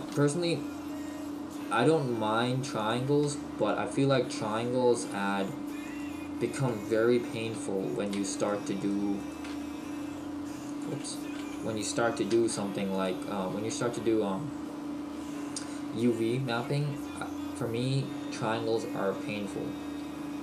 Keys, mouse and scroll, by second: 0.1 g, 2.9 click, 3.6 shift+right click, 5.9 shift+right click, 7.6 f, 8.4 right click, 9.5 g, 10.9 click, 11.4 ctrl+z, 12.4 f, 13.5 click, 14.2-14.5 scroll down 1.